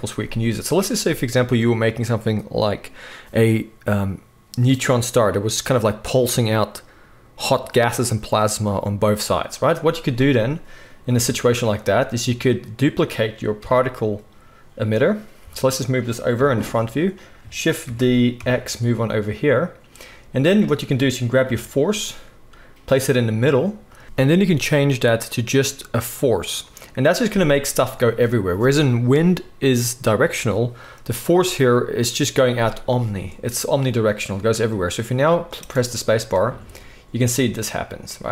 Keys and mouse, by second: 11.2 g, 14.9-18.4 middle drag, 15.4 g, 17.8 shift+d, 20.4 click, 21.4 g, 24.0-38.3 drag, 35.6 space.